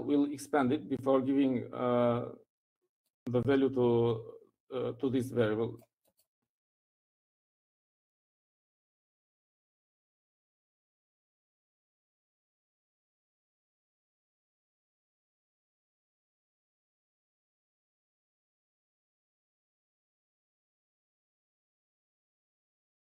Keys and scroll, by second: 10.3-12.4 typing.